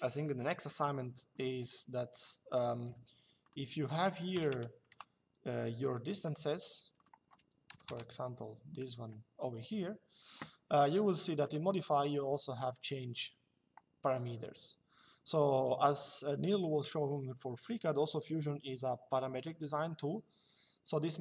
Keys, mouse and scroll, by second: 1.1 Escape, 2.3 click, 2.6 d, 3.1 click, 4.1 KP_1, 4.6 Return, 5.9 click, 7.4 KP_5, 8.7 Escape, 11.1 click.